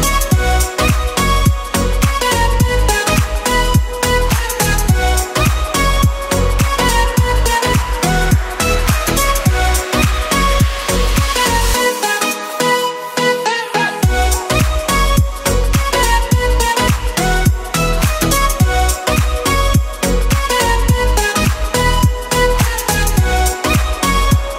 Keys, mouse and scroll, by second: 1.1 KP_Decimal, 1.8 click, 2.2 KP_1, 3.0 right click, 4.9-5.7 scroll down 2, 5.7 click, 7.2 click, 7.6 scroll down 2, 8.3 click, 8.8 click, 9.3 click, 11.5 click, 12.2 scroll up 6, 13.2 click, 14.1 click, 15.2 click, 15.7 click, 16.1 click, 16.9 click, 17.7 Delete, 17.7 KP_1, 18.3-19.4 scroll down 5, 20.3 click, 22.1 shift+a.